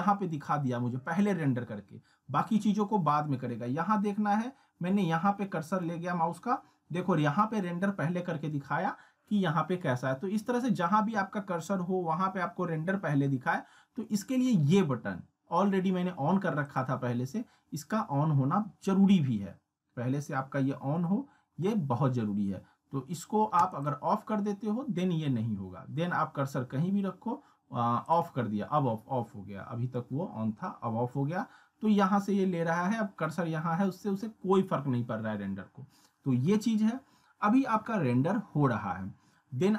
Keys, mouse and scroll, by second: 1.3-1.8 scroll down 1, 4.2 scroll up 1, 5.4-6.0 middle drag, 9.0 scroll down 1, 16.6 click, 23.6 click, 26.6-27.1 scroll down 1, 28.1 click.